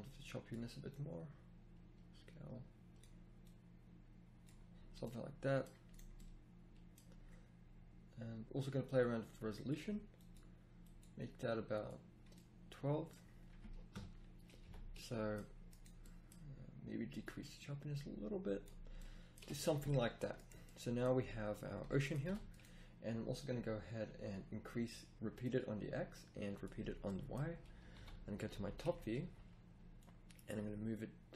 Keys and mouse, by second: 1.5-3.6 drag, 13.9 KP_0, 14.7 a, 17.1 middle click, 19.4 a, 22.2 a, 27.9 KP_7, 28.5 z, 29.2 z.